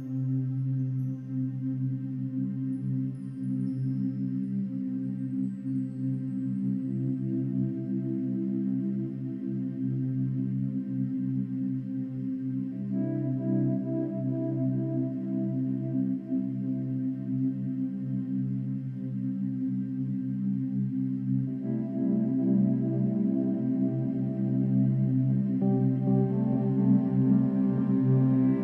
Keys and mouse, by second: 0.0 click, 4.0 click, 4.9 click, 7.2-9.1 drag, 10.4 click, 12.8-15.3 drag, 16.0 shift+click, 16.8 shift+click, 17.7 ctrl+g, 18.7-19.9 drag, 20.6 ctrl+g, 21.6-22.5 drag, 23.1 shift+Left, 23.3 shift+Left, 23.7 shift+Left, 24.3-26.4 shift+Left, 26.6-27.7 drag, 28.2 shift+Up.